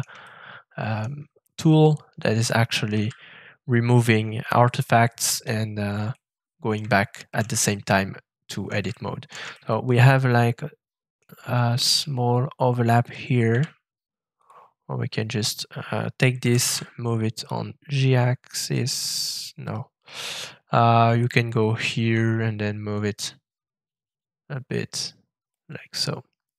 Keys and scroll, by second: 2.9 shift+<, 13.4 ctrl+<, 16.4 g, 16.6 z.